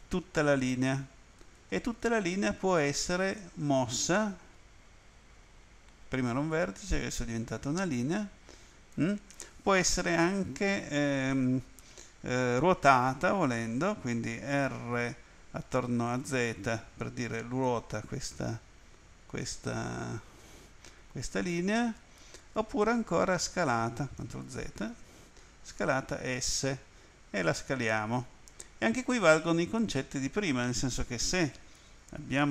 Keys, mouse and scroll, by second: 1.4 right click, 3.4 click, 16.0-17.2 typing, 21.3 click, 24.5 ctrl+z, 25.7 s, 29.3 right click.